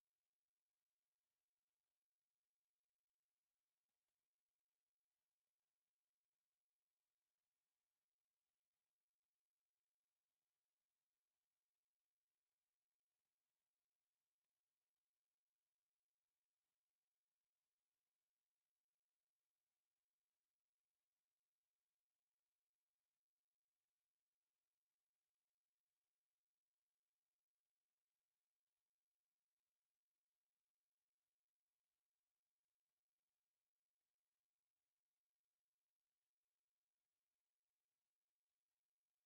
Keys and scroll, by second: 0.0-1.8 typing, 0.4 Escape, 1.2 Escape, 2.5 Escape, 3.2-8.0 typing, 3.5 Escape, 4.1 Escape, 5.0 Escape, 8.8 Escape, 19.5 Escape, 20.9-24.1 typing, 21.4 Escape, 22.1 Escape, 23.1 Escape, 25.7-28.1 typing, 26.3 Escape, 27.2 Escape, 27.7 Escape, 28.7 Escape, 29.2-32.8 typing, 29.5 Escape, 30.9 Escape, 31.7 Escape, 32.2 Escape, 33.4 Escape, 35.9 Escape, 38.4 Escape, 38.7-39.2 typing.